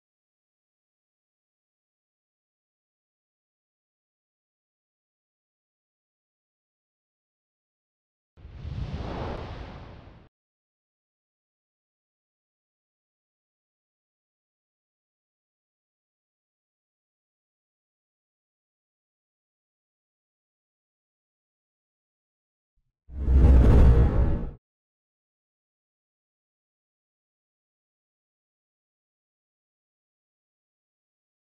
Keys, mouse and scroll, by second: 10.2 click, 12.7 scroll down 1, 14.3 click, 16.7 click, 24.6 ctrl+Num_Lock, 24.6 ctrl+scroll down 1, 24.6-25.6 typing, 25.1 ctrl+click, 25.5 ctrl+scroll down 1, 27.4 scroll down 1, 28.2 scroll up 1, 30.0 click.